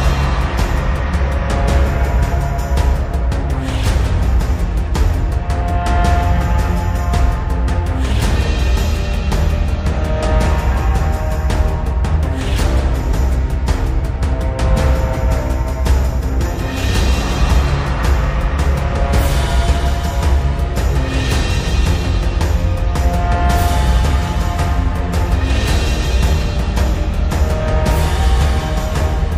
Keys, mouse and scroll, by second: 0.4-1.4 drag, 2.3 scroll up 1, 3.0-3.8 drag, 4.9 shift+m, 5.9-6.8 drag, 9.6 ctrl+z, 13.9 click, 18.7 ctrl+z, 20.6 v, 20.9-23.4 drag.